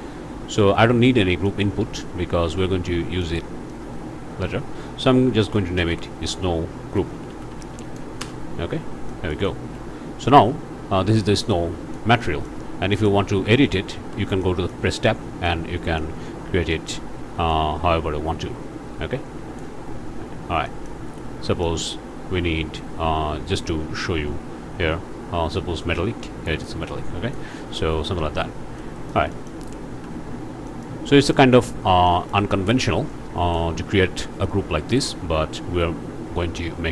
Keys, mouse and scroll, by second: 0.5 Tab, 0.8-1.3 scroll up 1, 1.4 click, 2.6 click, 3.7 click, 5.4-7.7 typing, 8.2 Return, 9.1 ctrl+click, 9.5 ctrl+space, 10.1-10.4 ctrl+scroll up 1, 11.5 click, 12.2 click, 12.6 scroll up 1, 12.9 click, 13.2 scroll up 1, 13.6 click, 14.0 Tab, 14.4 click, 15.5 click, 16.2-16.7 scroll up 1, 16.7 click, 17.5-19.8 drag, 20.0-20.5 scroll down 1, 20.6 click, 21.1 scroll up 1, 21.4 click, 21.8-22.1 scroll up 1, 25.6-27.5 drag, 28.8 click, 29.6 scroll down 1, 29.9 Tab, 30.2 scroll up 1, 30.7 click, 31.3 click, 32.1 click, 32.5 scroll down 1, 33.1 click.